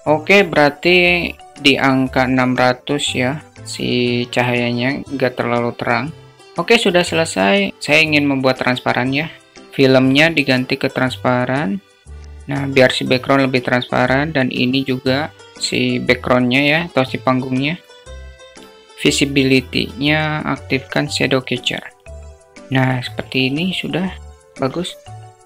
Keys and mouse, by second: 12.8 click, 15.2 click, 16.8 click, 17.5 click, 18.2 click, 21.2 click.